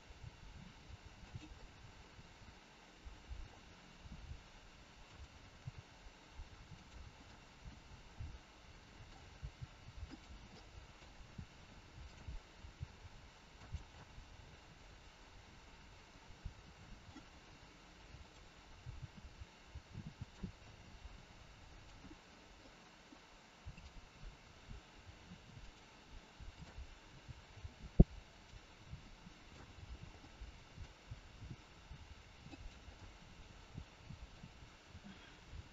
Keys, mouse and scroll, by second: 0.1 g, 1.5 middle click, 4.0 r, 6.7 g, 7.3 middle click, 7.3 scroll up 1, 9.3 g, 10.5 middle click, 11.9 click, 12.6 g, 13.9 middle click, 18.0 click, 18.8 g, 20.5 middle click, 23.7 middle click, 23.7 click, 24.4 r, 26.5 click, 27.0 r, 28.9 scroll up 1, 29.0 middle click, 29.8 scroll down 3, 30.1 middle click, 31.7 r, 32.8 middle click, 34.8 a, 35.4 i.